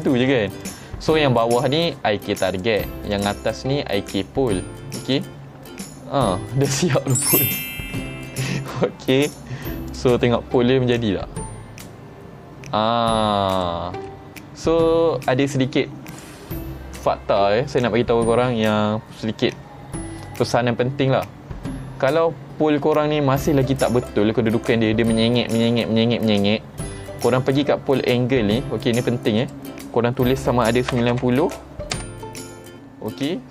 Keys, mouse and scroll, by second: 0.0 right click, 0.7 click, 2.6 click, 3.2 click, 5.1 click, 5.6 g, 9.3 right click, 10.0 click, 10.3-10.6 middle drag, 11.2 g, 13.6 right click, 14.1-14.4 middle drag, 16.2 click, 29.5 click.